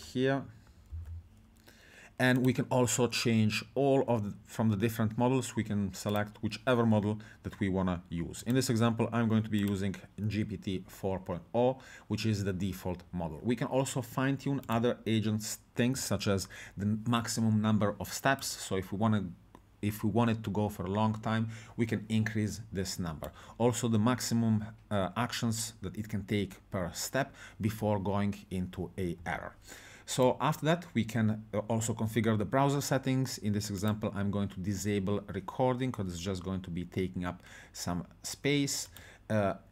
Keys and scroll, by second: 0.9 ctrl+v.